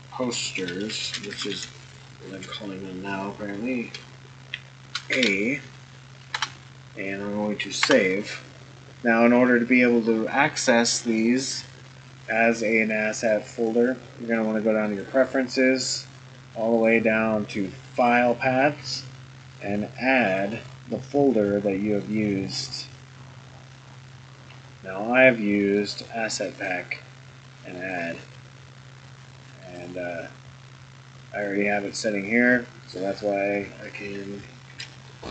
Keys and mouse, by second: 13.4-15.0 drag, 34.6 ctrl+s, 35.1 click.